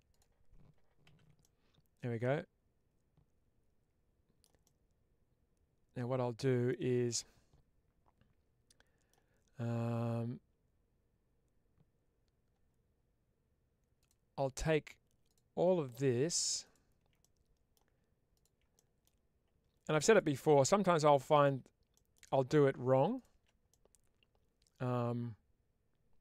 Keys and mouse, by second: 0.0 click, 0.9 ctrl+x, 1.3-4.3 middle drag, 4.5-6.6 middle drag, 7.0-9.0 middle drag, 13.9 click, 17.1 middle click, 18.6 middle click, 20.0-21.3 shift+drag, 21.8 middle click, 23.6-26.2 middle drag.